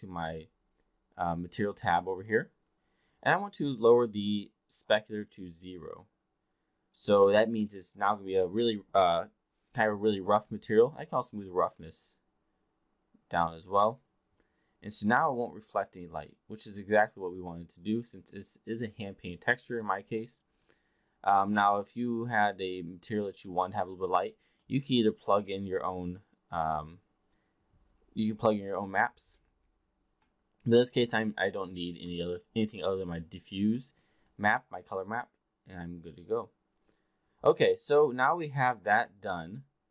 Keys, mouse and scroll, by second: 1.3 click, 2.0 click, 2.3 click, 5.2-7.3 drag, 11.6-13.8 drag, 15.4-19.0 alt+drag, 19.8-20.1 alt+middle drag, 20.6-23.3 alt+drag, 24.6 alt+middle click, 31.0 click, 32.2 alt+middle drag, 32.6-33.0 alt+drag, 33.7 alt+middle drag, 34.3 alt+click, 35.2-37.7 alt+drag, 38.0 alt+middle click.